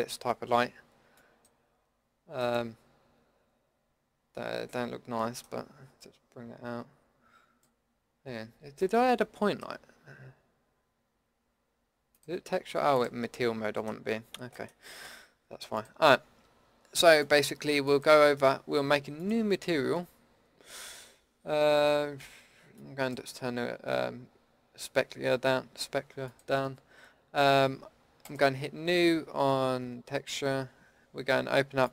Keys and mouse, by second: 1.7 click, 2.5-3.3 middle drag, 6.0-7.6 drag, 11.5 middle click, 12.1-13.0 drag, 15.8-17.8 drag, 26.3-28.3 drag, 31.8 click.